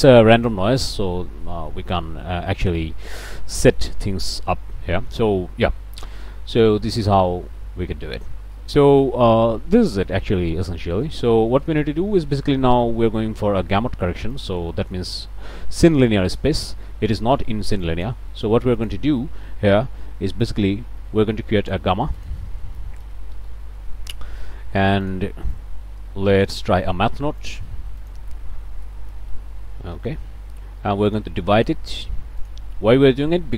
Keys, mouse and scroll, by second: 1.7-2.4 scroll down 1, 2.8-3.3 scroll up 1, 3.8 middle click, 8.3-8.8 scroll down 2, 8.8 middle click, 9.3-9.9 scroll down 1, 9.9 scroll down 1, 10.2 click, 10.3 middle click, 10.7 scroll down 1, 11.1 middle click, 11.6 middle click, 14.3 click, 14.7 click, 16.3 click, 17.8 click, 18.3 click, 18.8 click, 21.6 shift+click, 21.9 shift+a, 22.2 shift+click, 23.0 g, 23.1 a, 23.3 m, 23.8 Return, 25.0 click, 25.5-26.6 drag, 26.7 click, 27.4 shift+click, 27.8 shift+a, 28.0 shift+click, 28.8 m, 29.0 a, 29.1 t, 29.3 h, 30.0 Return, 31.1 click, 31.6 click, 32.4 click.